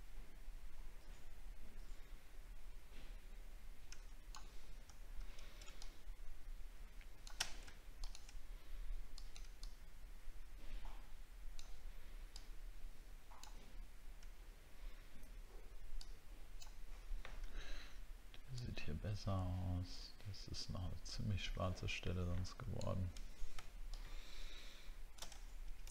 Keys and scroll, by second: 5.1 alt+scroll down 1, 25.5 alt+scroll down 3.